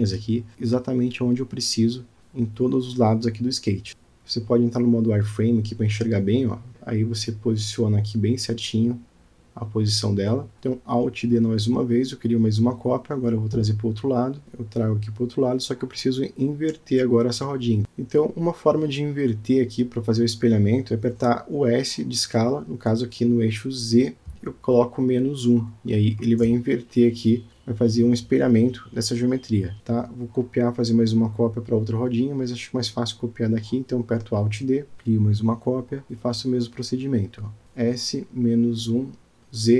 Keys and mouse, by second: 0.2 click, 1.6 KP_Decimal, 3.1 Tab, 5.7 click, 7.2 g, 12.1 Tab, 12.8 g, 17.3 s, 21.6 s, 24.8 g, 29.5 click, 31.5-32.0 shift+middle drag, 32.9 click, 33.7-34.0 shift+middle drag, 34.9 g, 37.8 s.